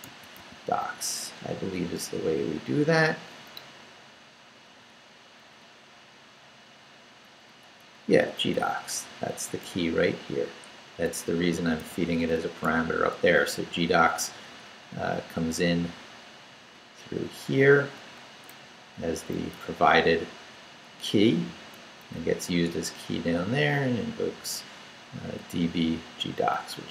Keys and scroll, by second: 0.0-0.9 typing, 0.9 Down, 3.7 Down, 5.6 Up, 7.2 Up, 8.6 Right, 9.3 Down, 9.6 Right, 11.5 Right, 13.1 Left, 16.7 Up, 18.6 Down, 19.5 Left, 20.9 Right, 22.1 Down, 24.5 Left, 26.8 Down.